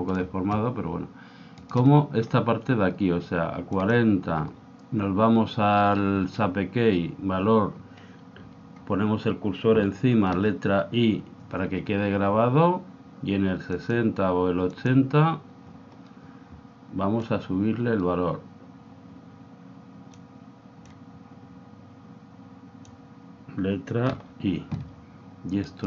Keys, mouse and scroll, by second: 1.6-3.3 right drag, 3.9 click, 10.3 i, 13.9-16.5 drag, 17.2 click, 20.9 click, 24.1 i, 25.7-25.8 right drag.